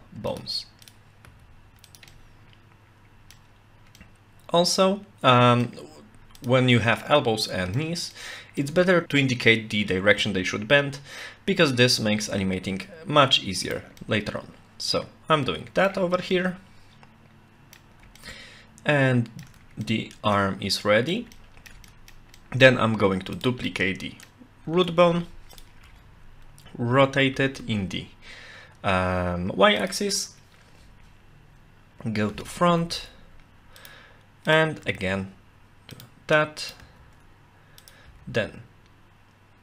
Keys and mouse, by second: 0.9 click, 1.2 g, 2.1-3.4 middle drag, 4.0-5.7 middle drag, 6.4 click, 6.7-7.8 middle drag, 8.2 middle click, 12.1 g, 14.0-15.9 middle drag, 16.3-17.8 middle drag, 18.2-19.5 shift+middle drag, 19.9 middle click, 20.9 middle click, 21.3 shift+middle click, 21.9 middle click, 22.4 middle click, 23.4 click, 23.7 middle click, 24.9 shift+d, 25.5 click, 25.8 r, 32.8 g, 34.5 click, 34.8 g, 36.6 click, 36.8 g, 38.1 e.